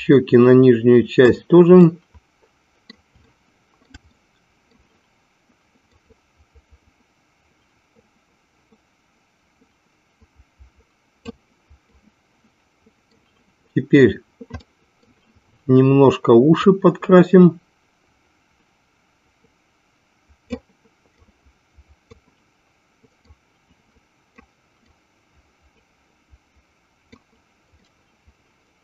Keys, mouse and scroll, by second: 1.9-3.1 middle drag, 3.3 shift+middle click, 4.1 middle click, 6.1-11.5 drag, 12.0-13.2 middle drag, 14.7 middle click, 16.7-20.7 drag, 21.5 click, 23.4-24.7 drag, 25.1-27.3 drag, 27.8-28.8 middle drag.